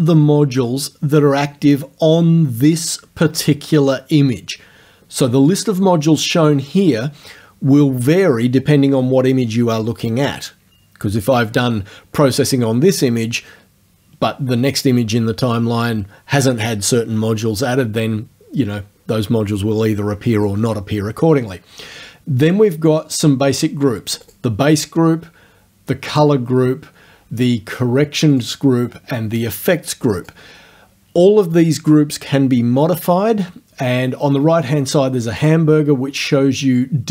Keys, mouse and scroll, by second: 24.3 click, 26.1 click, 28.4 click, 30.2 click, 35.4 click.